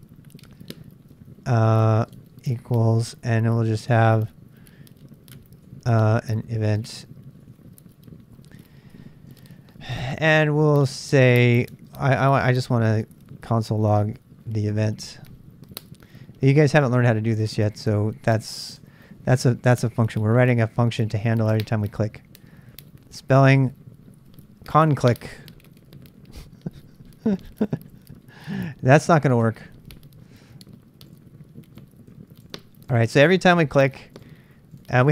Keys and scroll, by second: 0.0-2.9 typing, 4.9-14.4 typing, 16.2-20.5 typing, 27.2-29.4 Left, 29.4 BackSpace, 29.6 Return.